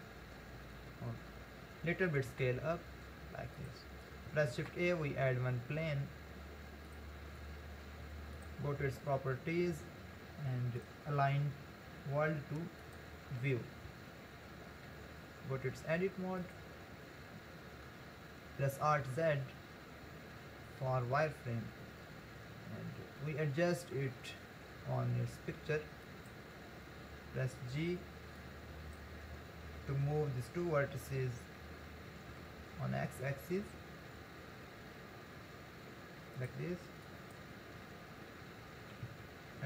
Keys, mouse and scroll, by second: 1.0-2.3 scroll up 1, 2.3 s, 4.5 shift+a, 8.4-13.8 drag, 15.6 Tab, 18.9 alt+z, 26.1 click, 28.4 click, 32.3 g, 37.1 click, 38.8 g.